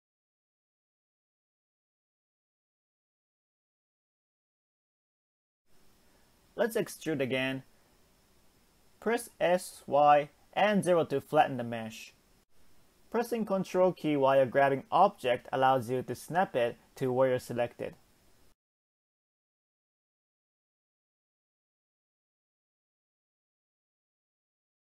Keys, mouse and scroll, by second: 0.4-1.0 scroll down 1, 1.0 ctrl+click, 1.6-3.1 middle drag, 3.1-4.5 scroll down 1, 4.5 e, 8.2 scroll down 2, 8.6-9.6 shift+middle drag, 9.6 s, 12.1 g, 14.0-15.8 middle drag, 15.8 Tab, 16.0 click, 16.4 x, 18.0-18.6 middle drag, 18.6-19.4 scroll up 1, 19.4 click, 20.2 ctrl+click, 20.9 x, 23.2 a, 24.1 m.